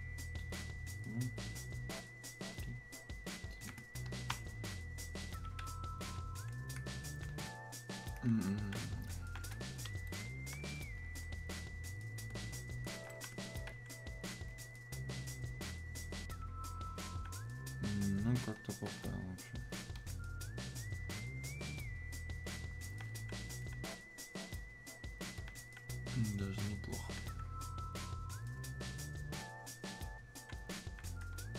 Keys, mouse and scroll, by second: 0.9 click, 6.0-20.0 alt+drag, 20.0-27.0 drag, 27.0-31.5 drag.